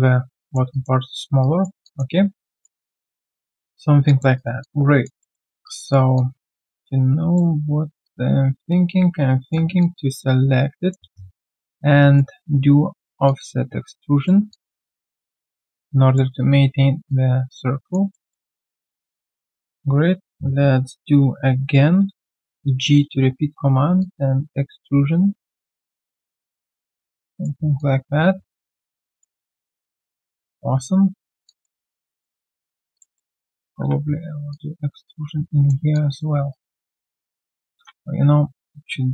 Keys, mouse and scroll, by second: 0.4 alt+middle click, 0.7 alt+click, 1.4 right click, 1.8 alt+click, 2.1-2.4 alt+scroll down 1, 2.4 alt+click, 2.8 alt+right click, 3.0 alt+click, 4.0 alt+click, 4.3 alt+right click, 4.6 alt+click, 5.2 alt+middle click, 5.6 alt+right click, 6.1 alt+click, 9.8 alt+click, 11.1 shift+right click, 12.0 alt+right click, 14.5 alt+click, 17.1 alt+click, 18.1 alt+middle click, 22.6 g, 27.7 alt+click, 31.4 alt+click, 31.8 q, 32.9 shift+click, 33.1 shift+double click, 33.6 w, 34.5 shift+click, 35.9 alt+click, 36.3 alt+click, 36.5 right click, 37.1 alt+click, 37.7 ctrl+z.